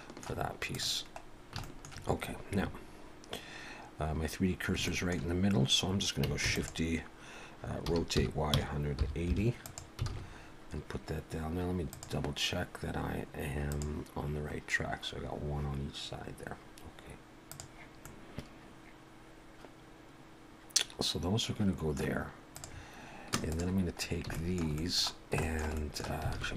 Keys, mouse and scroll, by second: 0.7 click, 1.3 scroll down 2, 1.7 shift+middle click, 4.9 shift+middle click, 6.5 shift+d, 7.9 r, 10.1 alt+a, 11.9 click, 13.6 click, 17.5 click, 18.0 middle click, 22.5 click, 23.5 shift+click, 24.0 scroll up 2, 24.3 shift+middle click, 24.8 middle click, 25.1 scroll down 1, 25.4 middle click, 25.7 middle click, 26.3 alt+a.